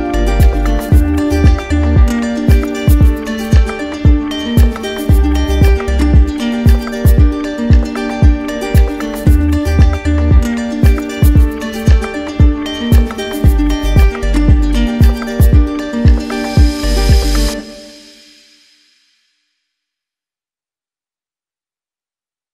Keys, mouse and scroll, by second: 0.4 click, 1.9 ctrl+z, 5.8 click, 6.0 ctrl+z, 6.7 right click, 8.4 right click, 8.9 right click, 12.3 click, 14.8 ctrl+click, 14.9 ctrl+z, 20.2 click, 21.3 click, 21.5 ctrl+z, 22.0 ctrl+z.